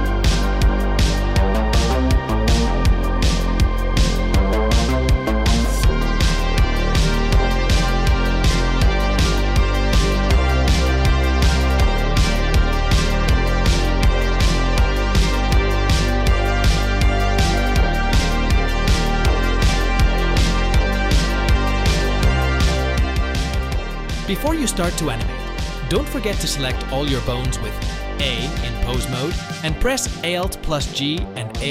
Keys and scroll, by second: 25.4 ctrl+Tab, 26.4 a, 27.6 alt+g, 28.7 alt+r.